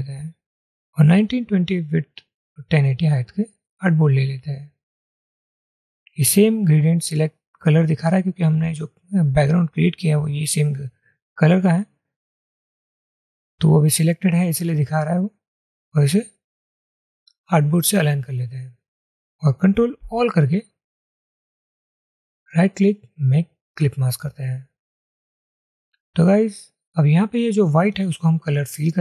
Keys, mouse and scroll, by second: 20.2 ctrl+a, 22.6 right click.